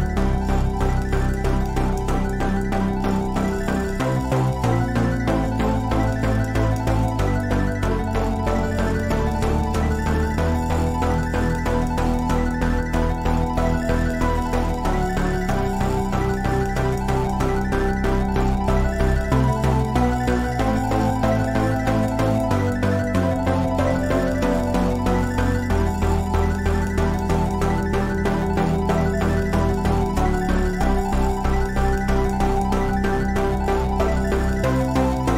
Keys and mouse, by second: 4.7-6.5 drag, 6.7-12.7 middle drag, 12.7-14.4 drag, 14.4 KP_1, 16.2 z, 19.2 z, 26.5-26.8 middle drag, 26.9 middle click, 28.7 KP_1, 34.2-35.3 drag.